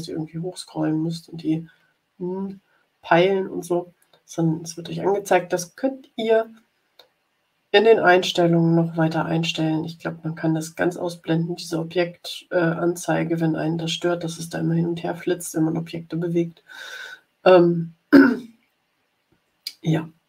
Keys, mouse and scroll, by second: 0.6 scroll down 1, 3.0-3.4 scroll up 1, 3.4 click, 16.9-18.6 scroll up 4, 19.0 scroll down 2.